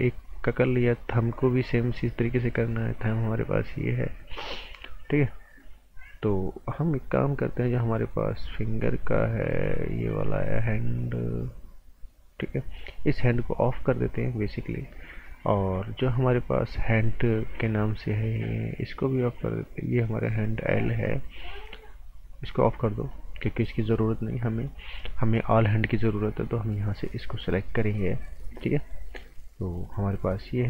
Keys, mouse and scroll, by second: 0.2 click, 2.8 click, 5.6 click, 13.0 click, 16.8 click, 20.2 click, 25.7 click, 26.7 scroll down 1, 27.0 right click.